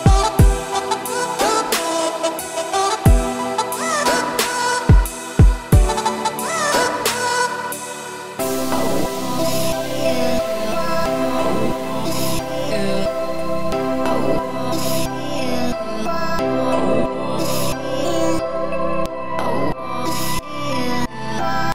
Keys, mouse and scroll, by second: 0.5 click, 1.4-3.8 shift+drag, 3.8 scroll down 2, 3.9 middle click, 4.3 Tab, 4.8 click, 5.2 `, 5.9 `, 7.4 shift+middle click, 7.7-8.1 scroll up 3, 8.1 1, 8.5 z, 8.9 click, 9.5 z, 9.9 scroll down 2, 10.1 shift+middle click, 10.8 z, 11.5 shift+click, 12.2 z, 13.2 ctrl+b, 15.8 z, 16.6 shift+click, 17.6 shift+click, 18.1 z, 19.0 ctrl+b.